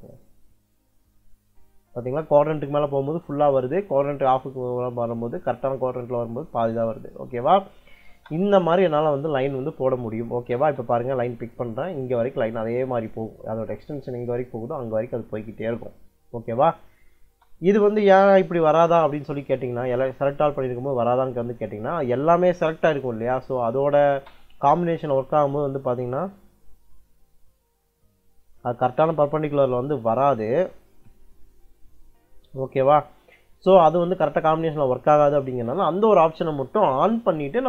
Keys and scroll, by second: 7.9 space, 10.4 space, 17.0-19.0 typing, 17.8 Escape, 23.7 l, 24.0 space, 30.8 F12, 35.4 Escape, 37.1-37.6 typing.